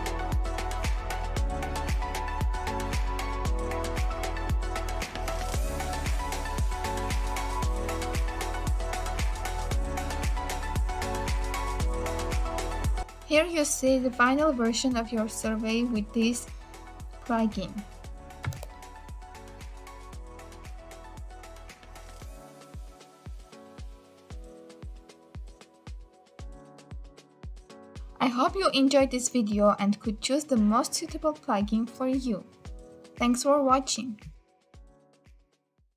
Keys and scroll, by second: 6.5 ctrl+v.